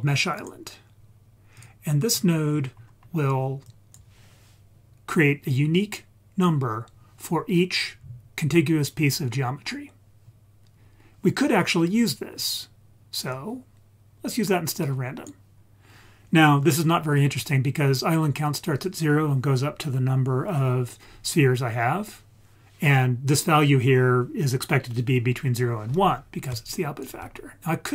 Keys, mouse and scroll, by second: 2.1 scroll down 2, 2.5-3.7 scroll up 5, 3.7 drag, 5.7-6.2 scroll up 2, 10.7 scroll down 2, 13.3-15.3 drag, 26.7 ctrl+right click.